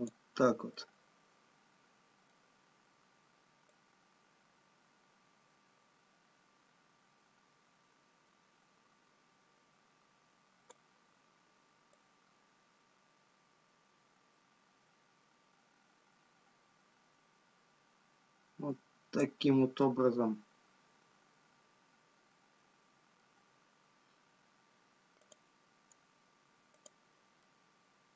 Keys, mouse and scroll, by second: 1.3 middle click, 4.5 click, 12.1 click, 19.8 middle click, 25.4 click, 25.4-26.9 scroll up 2, 26.9 click.